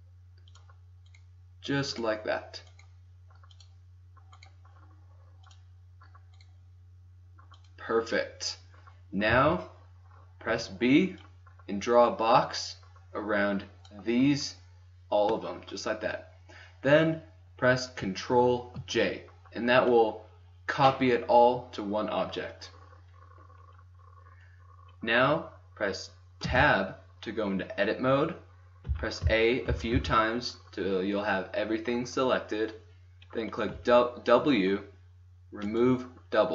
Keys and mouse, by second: 1.7 right click, 2.8-4.5 right drag, 5.0 right click, 5.0 click, 7.1 click, 7.6-8.7 right drag, 9.2 a, 10.5 b, 12.4 drag, 17.7 middle click, 18.7 ctrl+j, 20.5-22.0 drag, 23.1 right click, 26.5 Tab, 28.4 click, 28.8 a, 29.2 a, 29.6 a, 29.9 a, 33.1 middle click, 33.7 w.